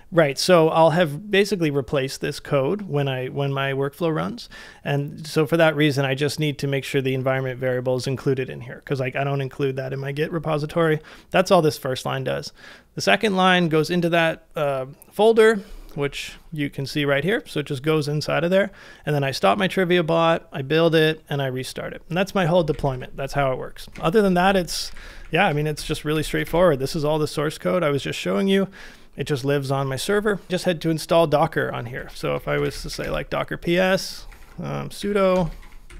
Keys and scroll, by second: 16.2 typing, 22.8 BackSpace, 22.9 BackSpace, 23.9-26.9 typing, 28.6 typing, 31.7-35.9 typing.